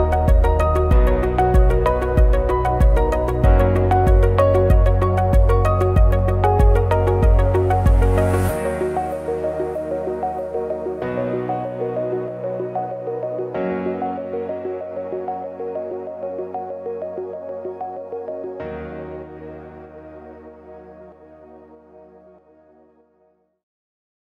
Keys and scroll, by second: 0.1 ctrl+c, 0.2 ctrl+f, 2.5 ctrl+c, 2.5 ctrl+f, 4.7 ctrl+c, 4.8 ctrl+f, 7.5 ctrl+c, 7.6 ctrl+f, 11.4 ctrl+shift+a.